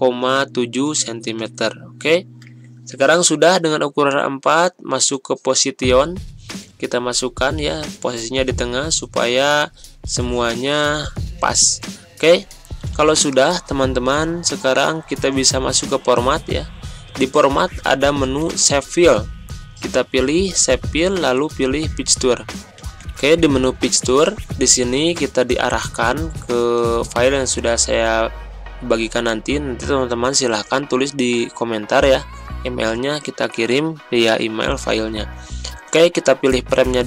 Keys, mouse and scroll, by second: 11.8 ctrl+scroll down 1, 13.1 ctrl+scroll up 1, 14.7 click, 18.4 click, 21.5 click, 22.7 Pause, 26.5 click, 35.8 click.